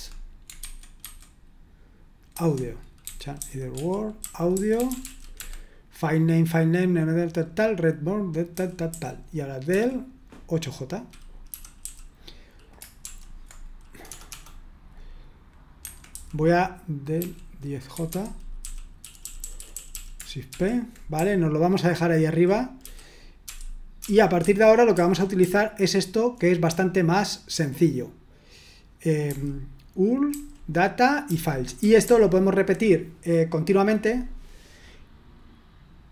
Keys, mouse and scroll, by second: 0.6 super+1, 2.4 super+1, 2.8-5.5 typing, 8.5-9.7 typing, 11.4-11.8 typing, 13.0 typing, 14.0 typing, 15.7 Escape, 16.1 typing, 17.1-24.9 typing, 29.2 typing, 30.2-32.5 typing.